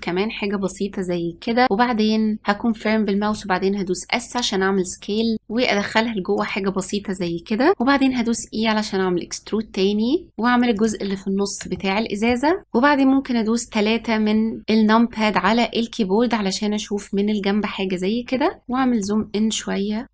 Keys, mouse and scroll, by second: 3.2 s, 8.1 e, 11.7 shift+middle click, 12.6 KP_3, 18.6-19.1 scroll up 3, 19.1 shift+middle click, 20.0-20.1 scroll up 1.